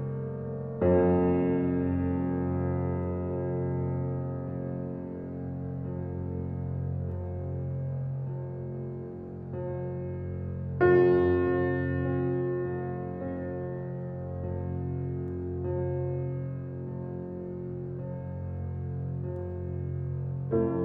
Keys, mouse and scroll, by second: 4.3 alt+click, 6.9-8.6 alt+drag, 9.8-11.7 shift+drag, 14.4 shift+click, 19.2 alt+click, 20.3-20.8 right drag.